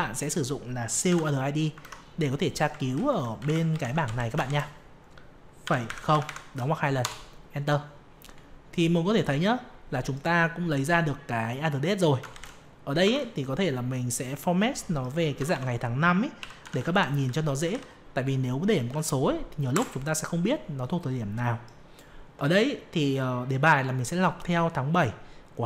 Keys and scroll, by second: 2.0 alt+Tab, 3.7 ctrl+Up, 4.4 ctrl+shift+Down, 12.3 ctrl+shift+Down, 13.0 ctrl+1.